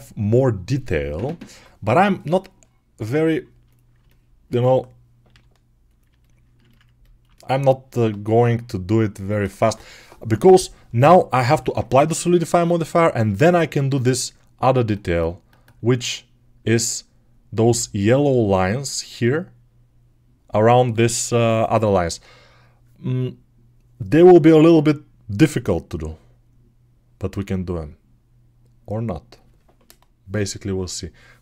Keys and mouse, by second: 3.5 click, 3.8-31.4 alt+middle drag, 5.1 g.